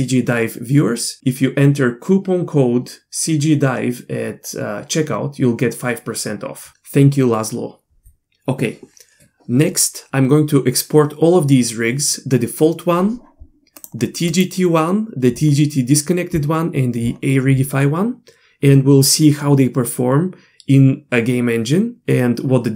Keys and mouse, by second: 14.4 click.